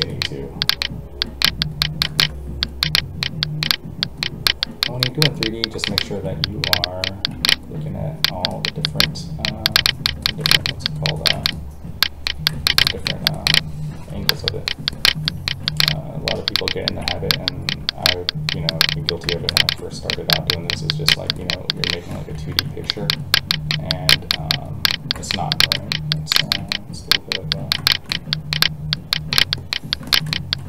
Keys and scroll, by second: 6.1 alt+a, 13.9 alt+a, 22.1 ctrl+z.